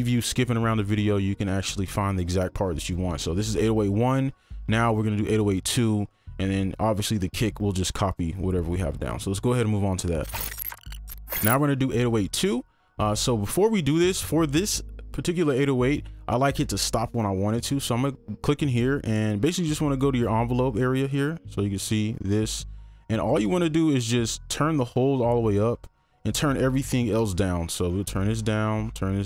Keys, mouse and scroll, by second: 25.1-25.8 scroll up 1, 27.5 scroll down 1.